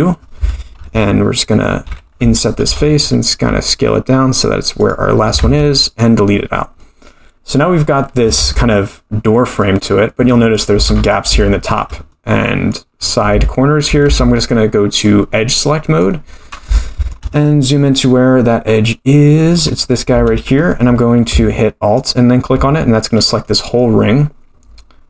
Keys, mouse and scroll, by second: 2.4 middle click, 2.7 i, 5.4 x, 6.8 middle click, 8.1 scroll up 1, 8.3 Tab, 9.1-9.6 scroll down 2, 9.6-10.5 middle drag, 10.7 Tab, 10.9-11.4 scroll up 4, 11.4 shift+middle click, 12.1 middle click, 13.0-13.3 scroll up 2, 13.4 shift+middle click, 14.0 2, 14.7-15.0 scroll down 1, 15.0 middle click, 16.4-16.7 scroll up 3, 16.7 shift+middle click, 17.3-19.8 middle drag, 21.9 alt+click, 22.7-23.8 scroll down 6, 23.7-25.0 middle drag.